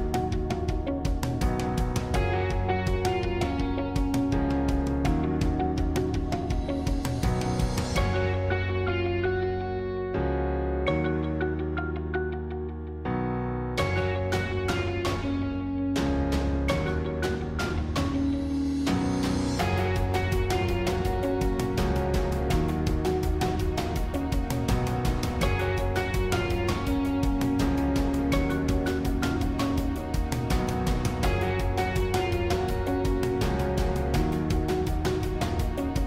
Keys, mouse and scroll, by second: 0.3 Left, 7.4-11.0 middle drag, 11.0 alt+shift+click, 12.1-14.1 middle drag, 14.1 shift+click, 14.6-16.9 middle drag, 16.9 alt+shift+click, 17.7 alt+shift+click, 18.5-20.4 middle drag, 20.4 shift+click, 20.8-25.7 middle drag, 25.7 click, 26.6 s, 31.1 g, 33.4-33.9 scroll down 2, 34.0-35.5 middle drag, 35.5 click.